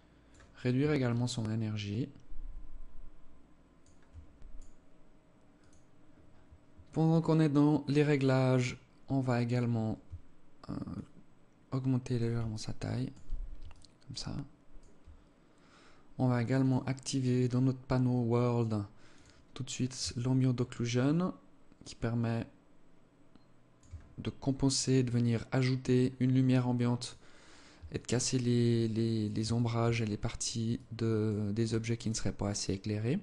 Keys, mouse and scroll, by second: 0.5 shift+click, 10.5 shift+click, 12.1 alt+click, 13.2 alt+click, 16.2 click, 18.7 click, 19.7 shift+click, 24.3 click, 24.8 click, 26.7 click, 27.5 alt+click, 29.1 alt+shift+click, 29.6 alt+click, 30.3 alt+click, 33.0 alt+click.